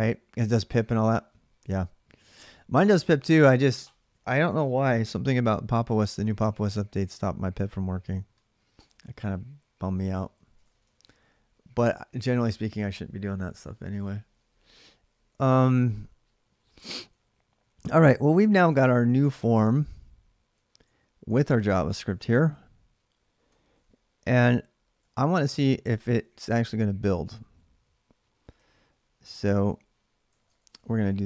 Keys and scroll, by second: 10.2-13.0 typing, 14.7-22.6 typing, 24.0-26.4 typing, 28.1-29.1 typing, 30.2 ctrl+[, 30.3 typing, 30.5 Return.